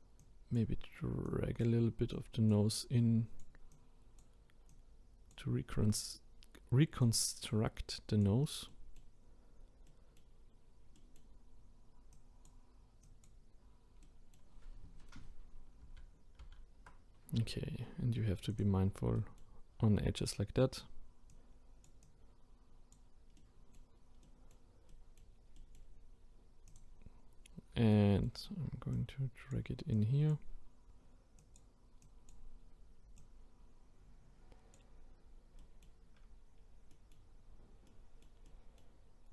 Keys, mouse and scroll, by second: 8.7-9.4 middle drag, 9.4-9.9 scroll down 3, 9.9-10.5 middle drag, 10.5-10.9 scroll up 1, 10.9-12.1 middle drag, 12.1-14.0 drag, 14.0-15.8 middle drag, 15.8 ctrl+z, 16.4 ctrl+z, 18.5 click, 19.2-20.4 middle drag, 20.4-21.3 scroll up 1, 21.3-23.4 drag, 23.4-25.5 middle drag, 25.5 scroll up 1, 25.6-26.7 middle drag, 26.7-27.2 drag, 27.2-27.9 scroll up 1, 27.9-28.9 shift+middle drag, 28.9-35.2 drag, 35.2 scroll down 2, 35.6-36.6 middle drag, 36.6-36.9 scroll down 1, 36.9-39.1 middle drag, 39.1-39.3 scroll down 2.